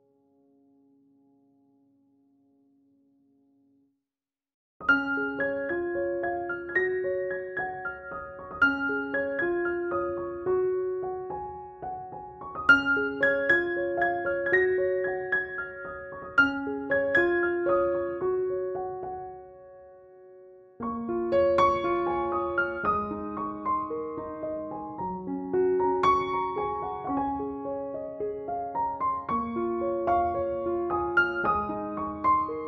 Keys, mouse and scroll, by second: 0.0-0.4 click, 0.6 [, 0.8 [, 1.1-1.9 click, 2.1 ctrl+-, 5.0 space, 5.2-5.7 click, 5.8 ctrl+=, 7.4 space, 7.4-8.0 click, 7.9 shift+w, 8.6-9.2 [, 9.3 click, 9.9 ctrl+-, 11.0 shift+F6, 13.3 ctrl+j, 13.8 ctrl+b, 14.6 click, 16.4 click, 17.3 alt+t, 17.8 click.